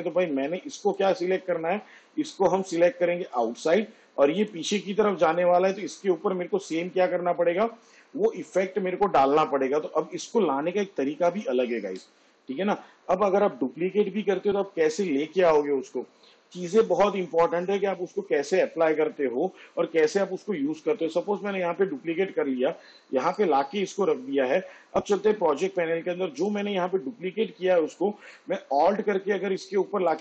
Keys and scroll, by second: 10.7 ctrl+z, 21.7 ctrl+d.